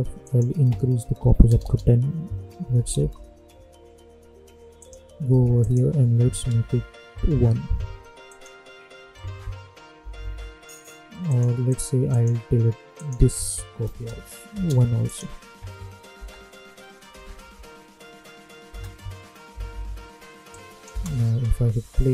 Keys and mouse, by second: 2.9 Return, 4.7 click, 8.2 click, 9.9 -, 10.2 -, 11.2 click, 16.1 space, 18.7 space, 19.5 -, 20.5 click, 20.8 space.